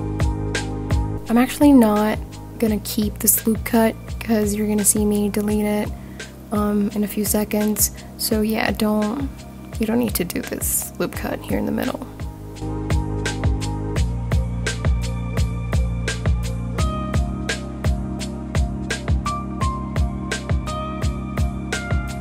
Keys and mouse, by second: 0.8 ctrl+r, 3.2 click, 4.2 g, 4.3 y, 6.7 shift+click, 7.1 Tab, 7.8 Tab, 8.7 click, 9.8 g, 10.1 y, 11.7 click, 12.1 ctrl+z, 13.5 g, 13.6 y, 14.3 click, 15.2 click, 16.2 shift+click, 16.9 g, 17.1 y, 18.8 click, 19.5 click, 20.5 shift+click, 21.5 g, 21.6 y.